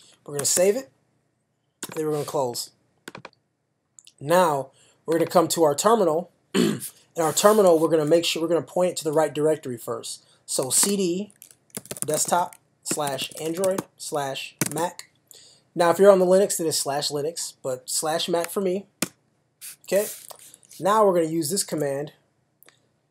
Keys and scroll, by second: 0.4 super+/, 0.6 super+s, 10.4-15.2 typing, 19.0 Return, 21.7 super+v.